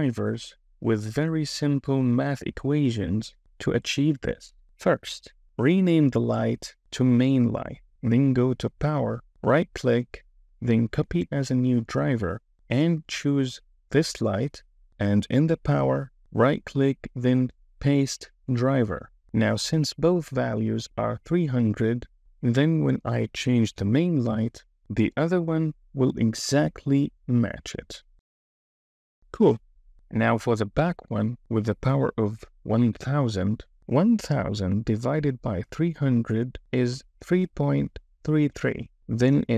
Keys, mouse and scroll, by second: 5.5 click, 5.7-7.8 drag, 9.2-11.5 right drag, 16.7-18.6 right drag, 23.6 KP_0, 26.1-28.5 drag, 30.0 click.